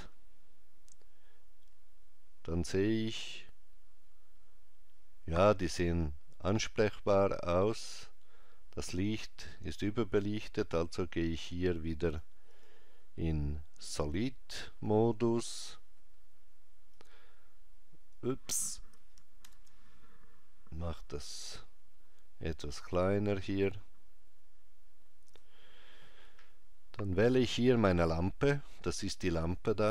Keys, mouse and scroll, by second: 10.7 click, 14.3 click, 15.2 scroll down 2, 17.0 click, 23.4 click, 29.4 click.